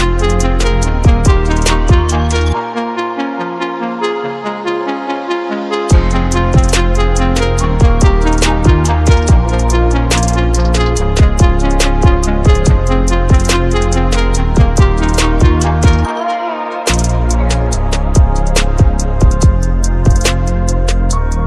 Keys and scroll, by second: 7.2 ctrl+s, 9.7 ctrl+=, 19.6 ctrl+-.